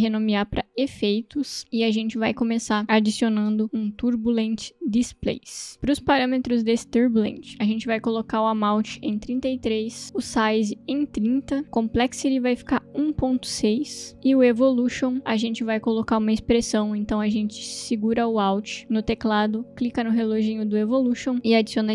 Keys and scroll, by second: 0.7-2.1 typing, 3.4-4.5 typing, 5.5 Return, 9.4 3, 9.4 Return, 10.2 Return, 11.6 Return, 13.5 ,, 13.8 6, 14.0 Return, 21.8-21.9 typing.